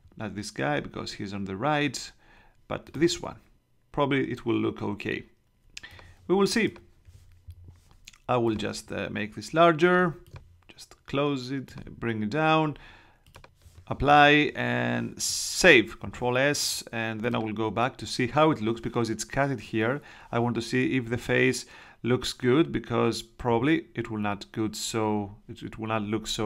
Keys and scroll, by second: 15.6 super+s.